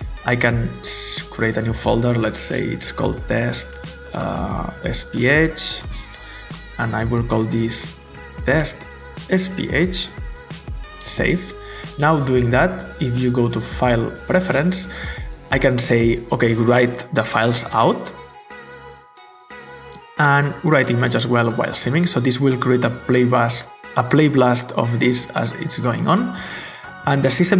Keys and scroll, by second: 2.0-5.1 typing, 5.3 Return, 5.8 Return, 7.8-10.1 typing.